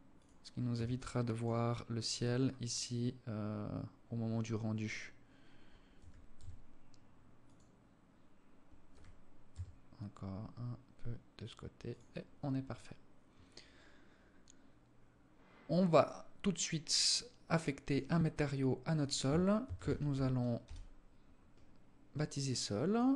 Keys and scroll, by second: 0.1 s, 5.4 g, 8.4 g.